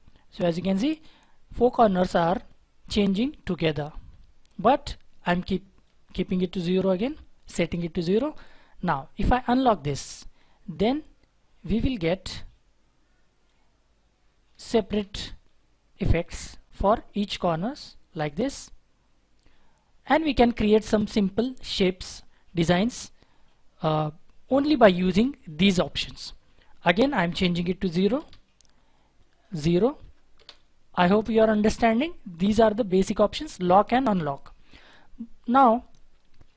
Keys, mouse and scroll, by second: 6.9 typing, 7.4 Return, 27.8 typing, 28.1 Return, 30.0 typing, 30.3 Return.